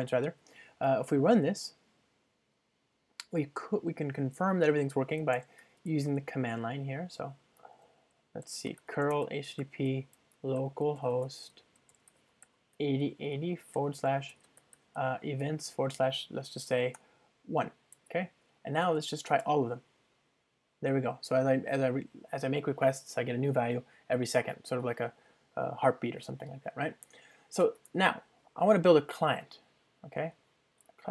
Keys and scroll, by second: 1.7 super+BackSpace, 1.7 ctrl+r.